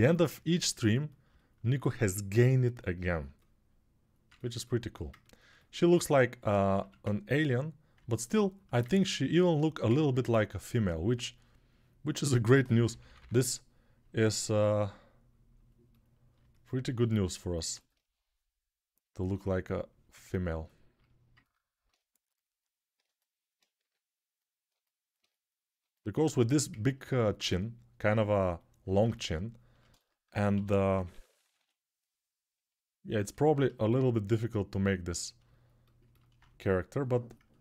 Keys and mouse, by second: 0.0 3, 4.5 alt+right click, 4.7 click, 4.9 ctrl+alt+right click, 5.3-12.7 alt+shift+drag, 6.5 1, 10.0 2, 11.9-13.0 typing, 17.5-22.9 ctrl+alt+drag, 23.6 g, 26.5-37.6 ctrl+alt+drag, 30.3-31.4 typing.